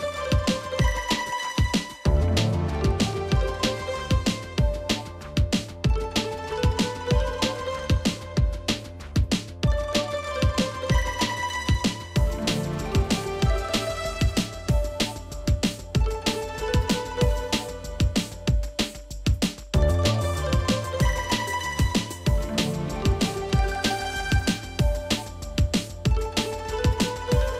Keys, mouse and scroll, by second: 3.6 double click, 4.0 double click, 4.4 double click, 4.8 double click, 12.8 double click, 16.5 double click, 25.5 ctrl+j.